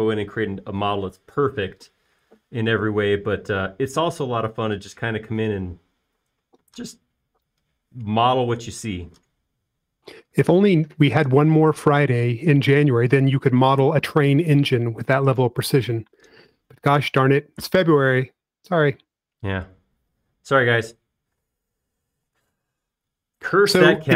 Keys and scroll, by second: 23.1 space, 24.0 l.